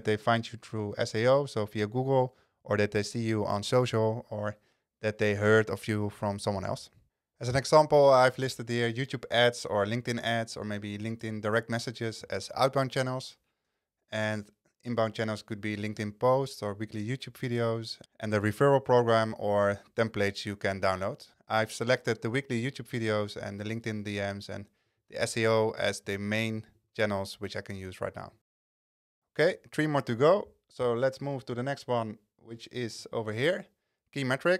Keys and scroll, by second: 26.2 super+a.